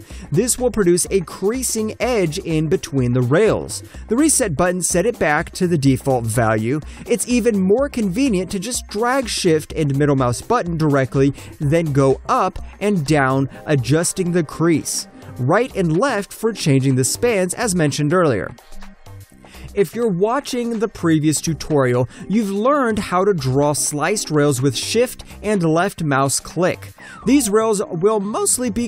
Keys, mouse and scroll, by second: 5.9 alt+click, 6.3 alt+click, 7.0 alt+middle click, 7.0 click, 7.6 shift+middle click, 12.4 alt+click, 12.5 alt+right click, 13.0 alt+click, 13.5 shift+middle click, 13.8 alt+middle click, 14.4 click, 15.1 shift+middle click, 17.5 shift+middle click, 20.4 alt+right click, 20.6 alt+click, 20.8 alt+right click, 21.0 alt+middle click, 21.3 alt+click, 21.6 alt+middle click, 21.8-22.2 alt+scroll up 1, 22.2 alt+middle click, 22.4 alt+right click, 23.1 click, 24.2 alt+middle click, 24.5 alt+click, 25.1 shift+click, 26.3 shift+click, 27.3 Return, 28.0 alt+click, 28.5 alt+middle click, 28.6-28.8 alt+scroll up 1.